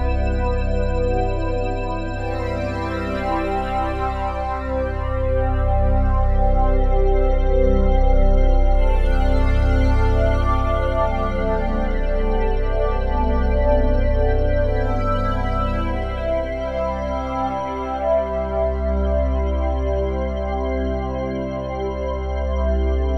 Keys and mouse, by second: 0.0-0.4 typing, 0.5 click, 1.9 click, 2.8-4.6 typing, 4.8 Return, 5.9-8.4 drag, 8.2 Delete, 9.5 click, 10.1-11.0 typing, 12.0 click, 12.3 click, 13.0 click, 13.7 click, 14.4 click, 15.2-16.5 drag, 15.9-16.6 typing, 17.2 click, 17.8 click, 18.6-20.2 typing, 19.6 click.